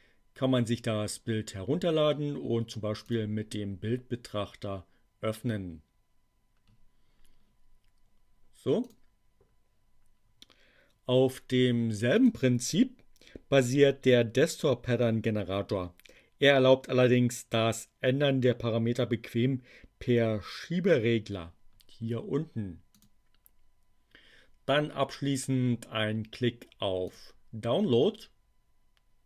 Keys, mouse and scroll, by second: 3.0 click, 8.8 click, 12.1 click, 22.9 click, 27.0 click.